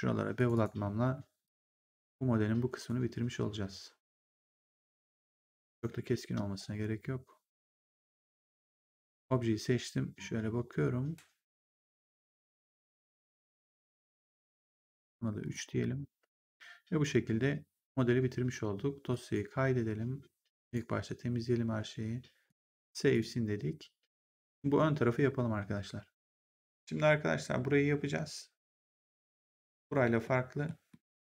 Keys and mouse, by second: 0.3 shift+click, 2.8 click, 5.5 right click, 5.8 3, 8.4 right click, 9.0 ctrl+1, 11.4 click, 13.3 click, 13.6 1, 14.8 click, 15.1 3, 15.3 click, 19.0 click, 20.6 click, 22.4 click, 24.8 middle click, 26.6 click, 28.7 middle click, 30.1 middle click.